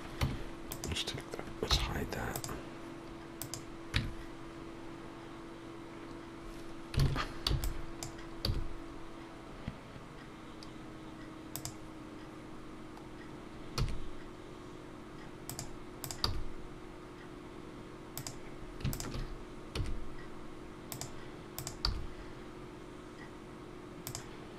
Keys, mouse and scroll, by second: 13.0 scroll down 1, 13.8 e, 16.0 click, 16.2 g, 18.9 shift+click, 19.8 shift+e, 21.5 click, 21.9 g.